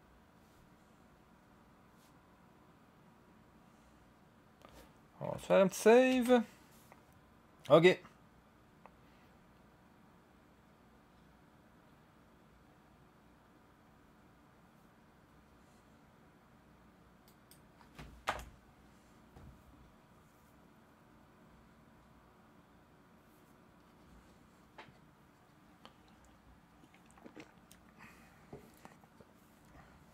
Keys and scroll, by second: 6.1 ctrl+s, 18.2 0.